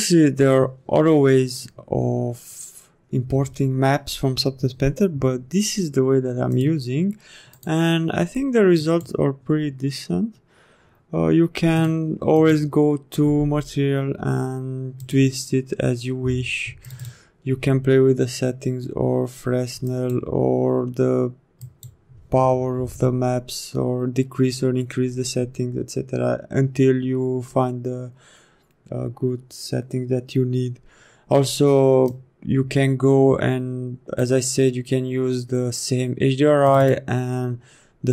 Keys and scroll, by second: 11.8 m.